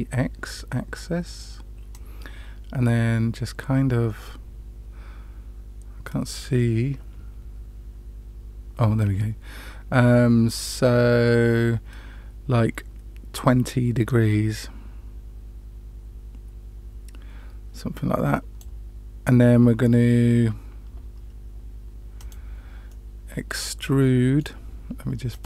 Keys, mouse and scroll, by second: 1.9-18.7 drag, 22.1 click, 22.8-24.4 middle drag, 25.3-25.4 drag.